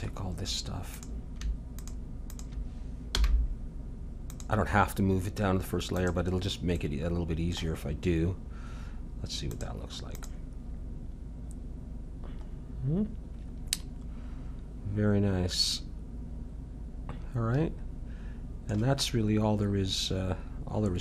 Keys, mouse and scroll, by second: 0.5 middle click, 1.0-4.1 drag, 3.1 m, 6.4-8.6 drag, 8.6 middle click, 9.5-11.6 drag, 12.5-16.6 middle drag, 16.7 middle click.